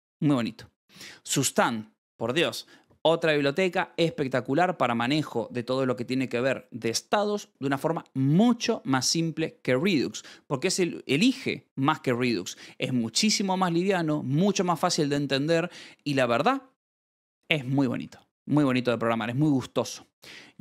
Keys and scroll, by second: 0.3-1.3 typing, 16.6 Escape, 18.0 ctrl+s, 18.6 j, 20.4 shift+v.